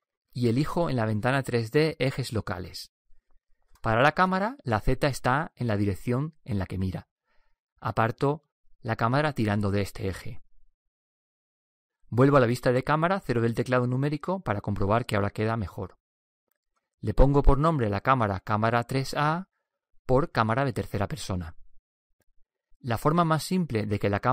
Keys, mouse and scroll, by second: 2.0-7.2 drag, 8.3-12.6 drag, 13.5 KP_0, 19.3-21.8 drag.